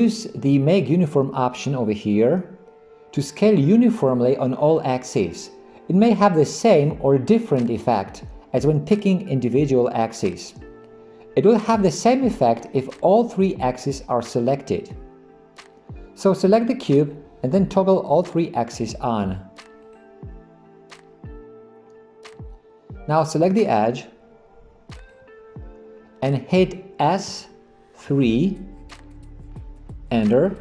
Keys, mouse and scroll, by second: 19.9 click, 25.0 click, 27.3 s.